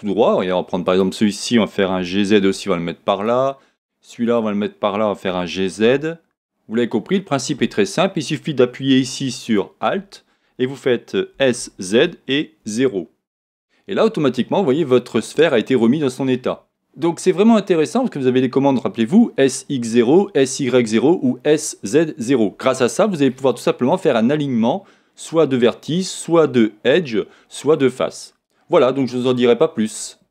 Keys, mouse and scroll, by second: 0.8-4.2 drag, 4.3 click, 6.9 g, 9.4 alt+click, 11.4 s, 13.6 Return, 14.9-30.3 middle drag.